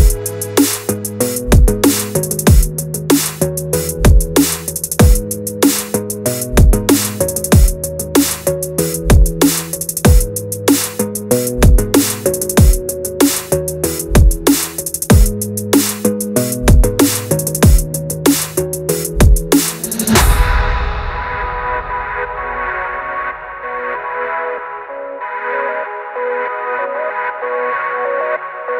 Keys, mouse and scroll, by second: 0.1 ctrl+c, 0.3 ctrl+v, 1.6 r, 2.7 ctrl+c, 2.8 ctrl+v, 6.1 g, 7.0 r, 7.7 click, 7.9 shift+drag, 8.1 shift+drag, 8.4 r, 8.8 s, 10.1 f, 10.3 z, 10.7 g, 12.3 g, 13.3 drag, 13.4 shift+drag, 13.7 shift+click, 13.9 g, 16.5 scroll down 4, 16.9-18.4 shift+middle drag, 18.6 shift+drag, 18.7 shift+click, 19.0 shift+drag, 19.3 shift+click, 19.4 shift+click, 20.2 ctrl+c, 20.4 g, 22.2 r, 24.1 g, 25.4 g, 27.6 drag, 27.7 shift+drag, 28.0 shift+click, 28.1 shift+click, 28.5 shift+click, 28.6 shift+click.